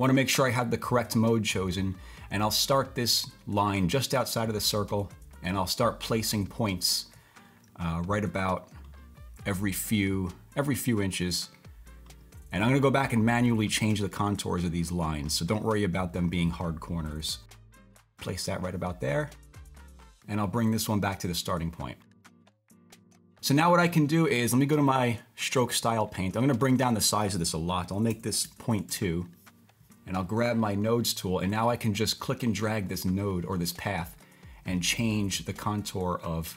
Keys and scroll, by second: 28.1-28.4 typing, 28.9 Return.